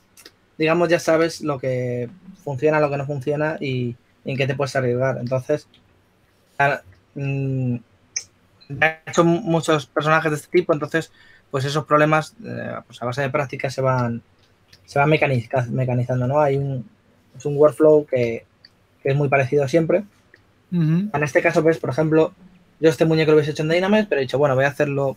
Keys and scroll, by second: 5.4-6.4 typing, 8.2-8.9 typing, 15.9-17.6 typing, 19.5 typing.